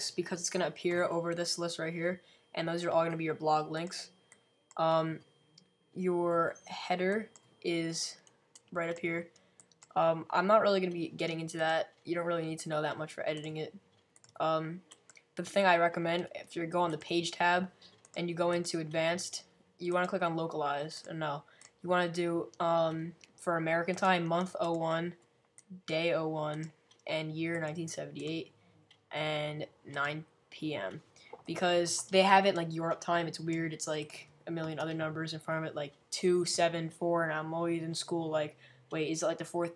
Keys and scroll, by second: 0.0-0.2 typing.